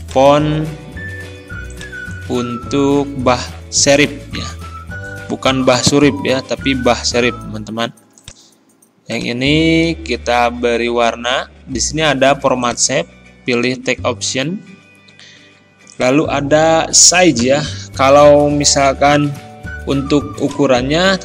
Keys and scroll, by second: 5.7 ctrl+[.